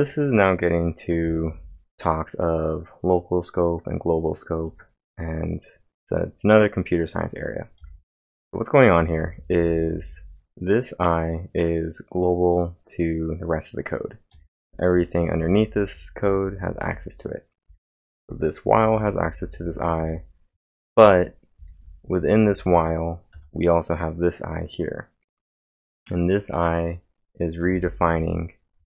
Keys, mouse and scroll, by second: 1.2 k, 1.5 k, 3.5 typing, 7.6-10.6 typing, 7.8 click, 7.8 scroll down 1, 14.3 click, 14.3 typing, 17.4-23.9 typing, 25.5 typing, 27.6 typing.